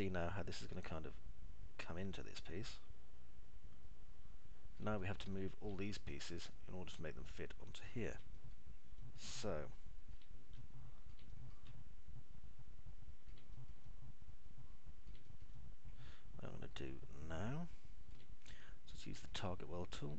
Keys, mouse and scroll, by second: 5.9 middle click, 6.4 alt+middle click, 6.9-9.3 middle drag, 9.4 middle click, 9.9 middle click, 10.4 alt+middle click, 11.6 alt+middle click, 12.4-14.3 alt+middle drag, 14.8-15.9 alt+middle drag, 16.3 middle click, 16.6-19.3 alt+middle drag.